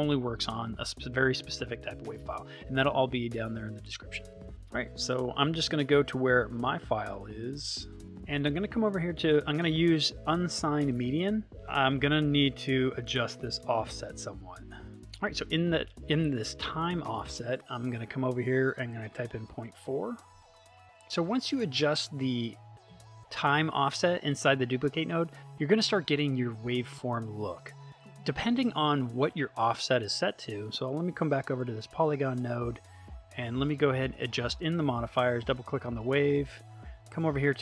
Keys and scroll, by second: 17.7 BackSpace, 18.9 ..